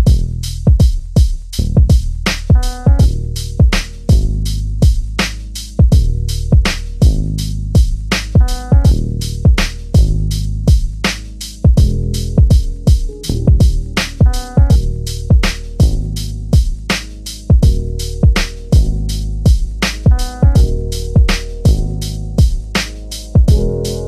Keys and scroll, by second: 7.3 3, 12.5 l, 15.4 l, 15.8 3, 18.5 l, 23.1 3.